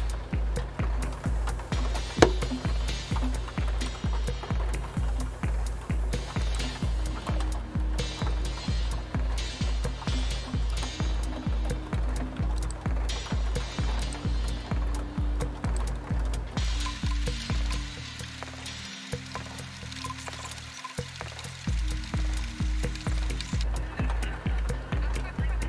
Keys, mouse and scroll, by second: 6.4 click, 9.2-9.9 scroll down 2, 10.7 click, 12.6 click, 14.0 click, 15.7 click.